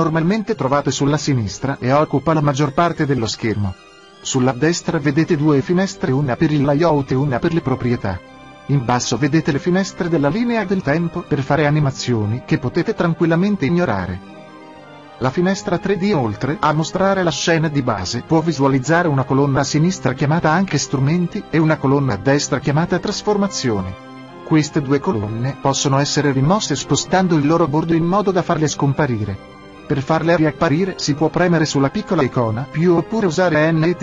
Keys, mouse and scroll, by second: 17.6-19.5 drag, 25.1-30.0 drag, 31.3-33.3 drag.